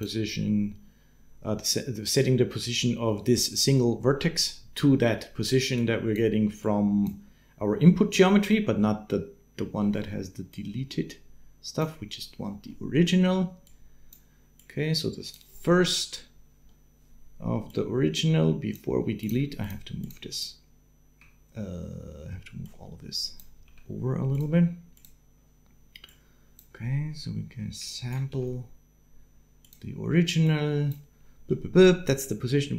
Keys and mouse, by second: 5.5 click, 6.4 click, 8.9 click, 12.5 click, 13.6 click, 14.5 click, 17.5-18.6 drag, 19.0 click, 19.4 shift+click, 19.8 shift+click, 22.4 click, 23.4 g, 25.9 right click, 30.2 g, 31.3-32.7 middle drag.